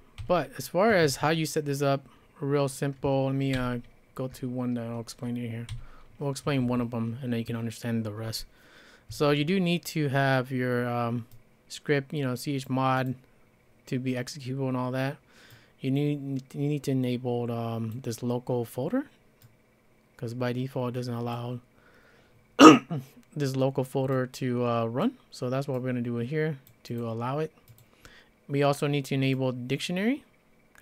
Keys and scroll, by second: 0.2 k, 0.9 Escape, 1.1 Escape, 3.5 alt+l, 5.7 l, 6.6 Escape.